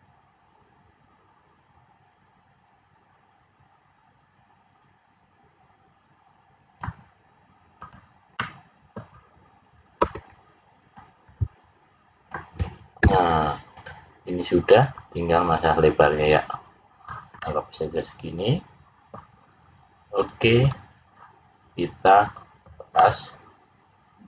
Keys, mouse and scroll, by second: 7.8 click, 8.3 middle click, 10.0 l, 10.9 click, 12.9 `, 14.8 click, 17.3 middle click, 20.1 click, 22.2 click, 22.9 middle click.